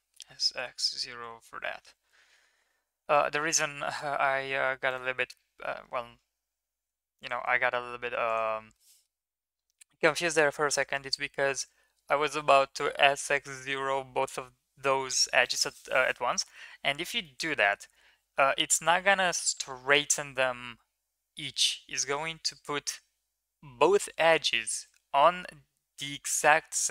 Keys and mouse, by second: 0.1 s, 2.3 Tab, 2.9 Tab, 3.7 3, 4.8 middle click, 7.2 middle click, 8.8 middle click, 11.6 middle click, 17.2 shift+middle drag, 17.7 middle click.